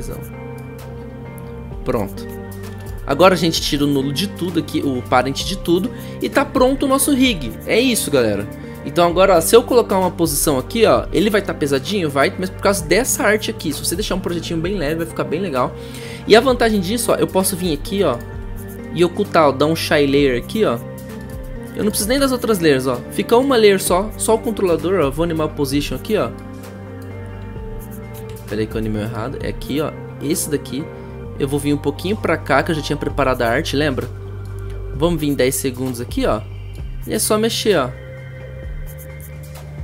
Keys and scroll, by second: 10.9 p, 24.7 p, 28.2 ctrl+z.